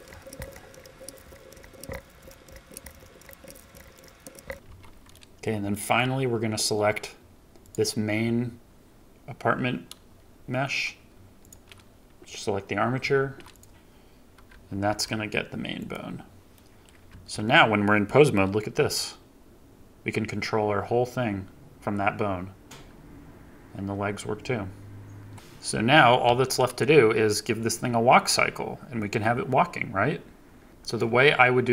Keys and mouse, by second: 0.3 ctrl+p, 0.5 ctrl+Tab, 0.8 ctrl+Tab, 1.0 ctrl+p, 1.6 ctrl+Tab, 1.8 ctrl+p, 2.2 ctrl+Tab, 2.5 ctrl+Tab, 2.7 ctrl+p, 3.0 ctrl+Tab, 3.2 ctrl+Tab, 3.4 ctrl+p, 3.7 ctrl+Tab, 4.2 ctrl+Tab, 4.3 ctrl+p, 4.6 ctrl+Tab, 5.6 shift+middle drag, 7.5 click, 13.1 ctrl+Tab, 14.8 ctrl+p, 16.5-16.8 drag, 17.0 KP_3, 18.7 g, 25.3 middle drag, 25.7 middle click, 26.2 KP_3.